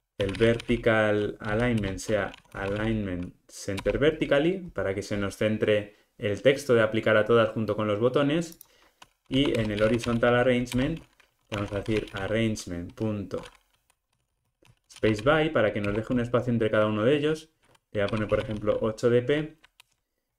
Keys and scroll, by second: 1.8 Return, 10.8 Return, 15.9 Return, 19.8 alt+Return.